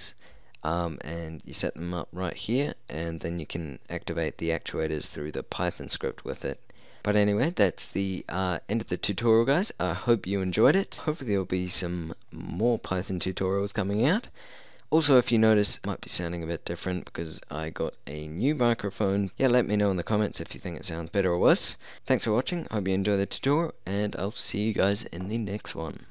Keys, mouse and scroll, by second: 15.4-19.3 middle drag, 25.8 middle click.